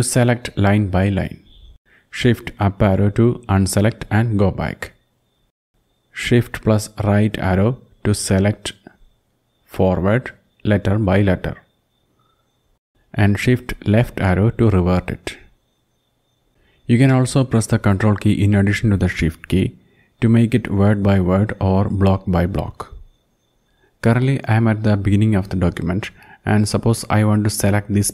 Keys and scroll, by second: 0.2 shift+Down, 2.1 shift+Up, 2.7 shift+Up, 8.6 ctrl+shift+Right, 9.0 ctrl+shift+Right, 9.5 ctrl+shift+Right, 9.9 ctrl+shift+Right, 10.1 ctrl+shift+Right, 10.6 ctrl+shift+Right, 14.0 shift+Left, 14.5 shift+Left, 14.7-16.4 shift+Left.